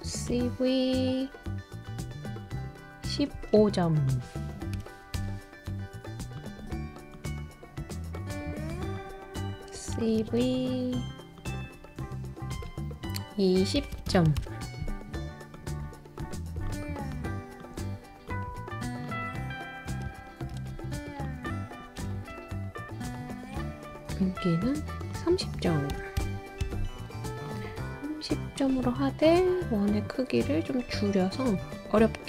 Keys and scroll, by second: 4.7-5.1 BackSpace, 9.9 super+c, 10.2 super+v, 13.8 BackSpace, 13.9 BackSpace, 14.1 BackSpace, 20.1 super+c, 20.5 super+v, 22.1 super+z, 25.9 Left, 26.2 BackSpace, 26.6 BackSpace.